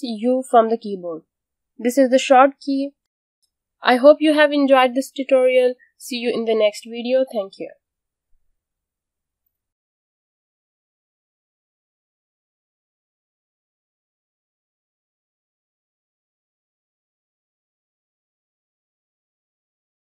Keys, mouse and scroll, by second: 0.0-0.5 typing, 0.7 click, 2.9 space.